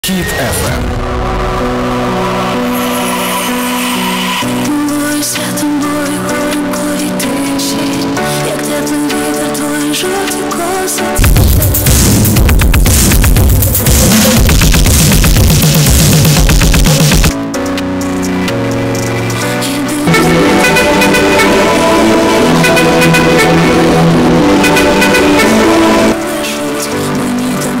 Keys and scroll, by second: 0.1 ctrl+q, 1.8 typing, 2.0-3.0 Down, 4.4 Down, 4.4 Return, 4.4 typing, 17.3 Page_Down, 26.5 Page_Down.